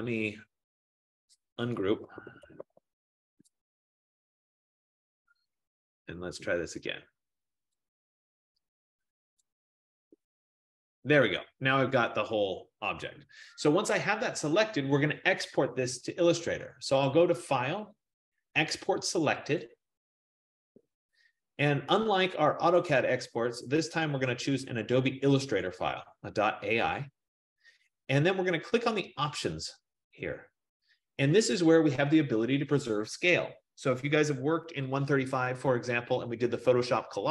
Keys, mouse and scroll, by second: 1.7-3.5 typing, 6.3-9.6 drag, 8.7 F15, 17.1 click, 19.9 click, 23.0 click, 25.8 click, 29.7 click, 32.8-35.4 drag.